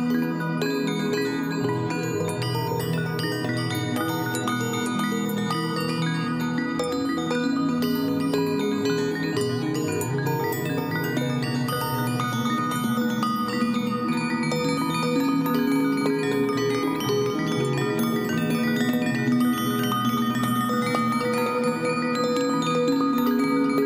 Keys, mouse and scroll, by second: 7.5 right click, 19.5 ctrl+t.